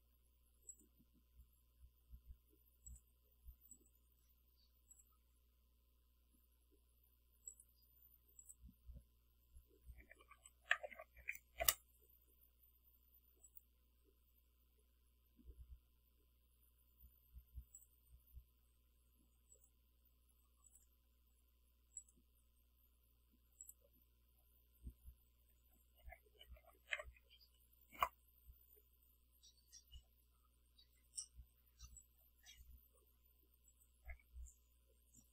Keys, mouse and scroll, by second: 0.8 click, 3.0 click, 3.8 click, 5.0 click, 7.6 click, 8.5 click, 10.3-11.3 typing, 11.7 Return, 13.5 click, 17.8 click, 19.6 click, 20.7 click, 22.0 click, 23.7 click, 26.1-27.3 typing, 28.0 Return, 32.0-33.2 drag, 33.8 click.